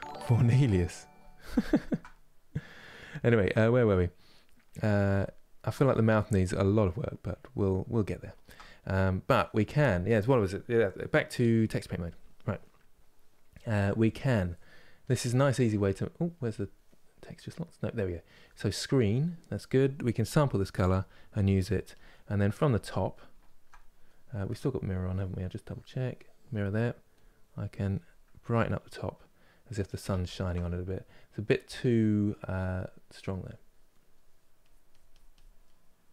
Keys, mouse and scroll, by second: 11.7 click, 12.3-21.6 middle drag, 21.8-27.0 middle drag, 27.0 click, 27.6-29.8 middle drag, 29.8 ctrl+z, 33.1 click, 33.6 middle click, 34.5 click, 35.0 click, 35.3-36.1 middle drag.